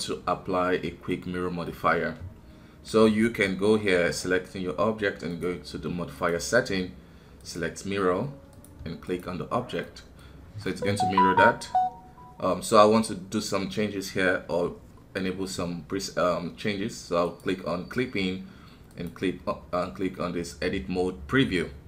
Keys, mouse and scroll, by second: 3.2 Tab, 5.3 click, 6.1-9.5 drag, 9.5 scroll down 1, 9.8 middle click, 10.3 scroll up 3, 10.6-13.6 middle drag, 17.2-21.8 drag.